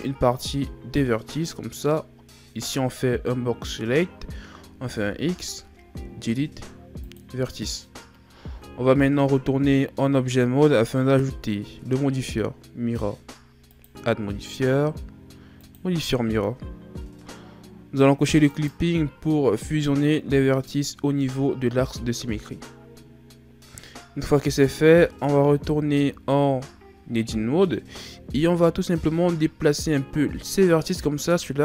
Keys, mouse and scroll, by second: 4.9 x, 8.5 Tab, 13.7 click, 18.5 click, 25.5 Tab, 28.0-30.1 shift+scroll up 2.